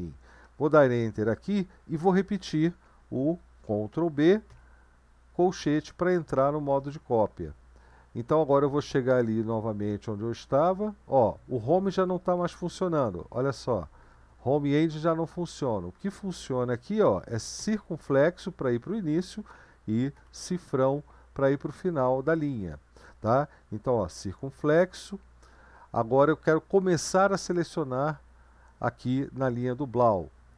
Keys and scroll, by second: 0.8 Return, 3.9 ctrl+b, 4.5 [, 7.4 Up, 7.6 Up, 7.8-8.8 Up, 10.2 Home, 11.2 Down, 11.6 Up, 12.9 Home, 13.3 Home, 14.0 Home, 14.4 End, 14.6 Home, 15.5 End, 15.9 Home, 20.1 typing, 28.3 Down.